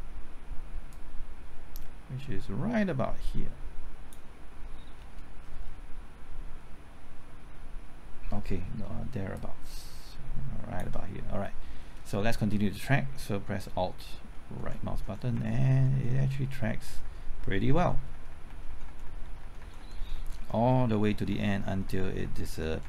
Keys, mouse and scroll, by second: 0.9-4.9 drag, 4.9-5.4 scroll down 1, 5.4-6.9 scroll up 1, 9.3 shift+click, 11.4-12.0 scroll down 1, 14.6 alt+Right, 15.0 alt+Right, 15.3 alt+Right, 15.5 alt+Right, 15.7 alt+Right, 19.9-20.6 typing.